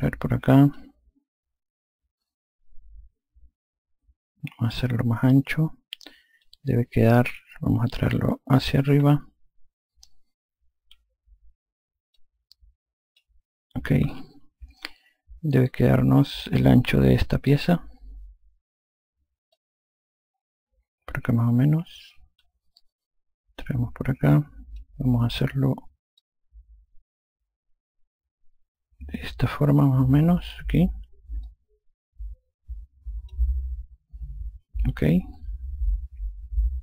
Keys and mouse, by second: 0.0 click, 4.7 click, 10.8 F1, 12.1 click, 14.0 F2, 15.8 click, 19.5 click, 23.6 click, 26.1 click, 31.4 click.